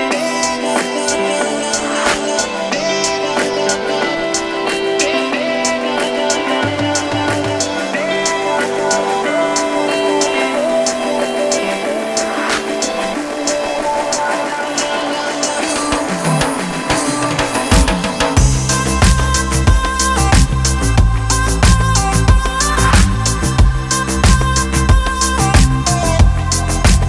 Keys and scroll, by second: 3.3 Escape, 3.4 d, 3.9 1, 4.0 Return, 5.4 Escape, 5.5 d, 5.8 1, 5.9 Return, 6.3 Escape, 9.8 -, 10.0 Return, 22.1 Delete, 26.0 -, 26.3 4.